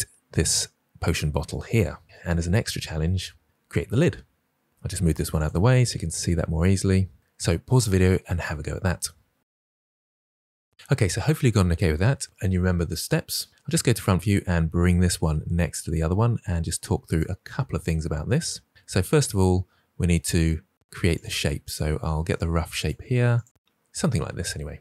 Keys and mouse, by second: 1.9 middle click, 3.4 click, 5.1 g, 5.7 click, 13.5 KP_1, 14.8 g, 19.2 Tab, 20.8-23.4 typing, 21.2 click, 21.5 drag, 21.8 click, 22.0 drag, 22.3 click, 22.9 click, 23.2 drag, 23.8 drag.